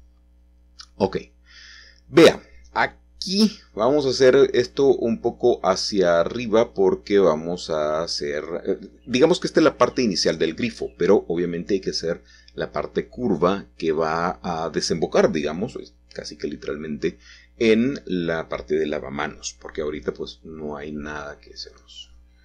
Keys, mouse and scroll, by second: 0.1-1.4 typing, 4.9 shift+click, 5.6-6.2 scroll down 2, 5.8 middle click, 6.4-7.9 shift+middle drag, 9.2-9.6 scroll down 2, 10.6 middle click, 13.5 middle click, 13.9-14.4 scroll down 2, 14.0 middle click, 14.6 shift+middle click, 16.1-17.5 middle drag, 21.9 click.